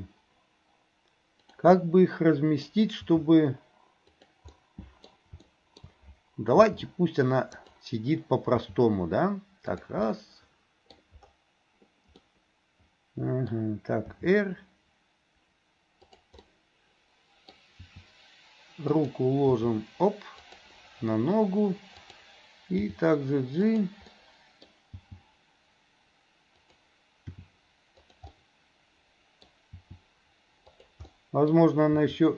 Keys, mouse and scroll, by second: 0.0 g, 1.7 scroll up 1, 1.9 middle click, 2.7 scroll down 1, 3.1 g, 4.6 middle click, 5.5 middle click, 6.6 r, 8.6 g, 10.1-11.6 middle drag, 12.2-14.1 middle drag, 14.1 r, 16.5-17.6 middle drag, 17.8 r, 19.5 g, 22.0 click, 22.9 g, 24.1 middle click, 25.1 g, 27.3 r, 28.3-29.5 middle drag, 29.8 r, 31.1 middle click.